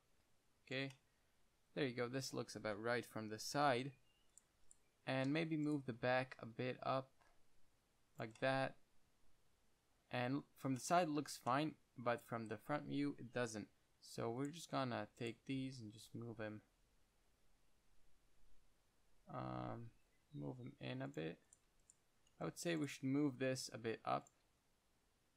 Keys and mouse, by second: 3.9-6.4 typing, 4.6-5.9 drag, 7.1 click, 8.5 click, 8.7 middle click, 10.6 middle click, 13.8-15.9 typing, 14.7-16.9 drag, 21.5 click, 21.8-23.0 middle drag, 22.0-24.8 typing.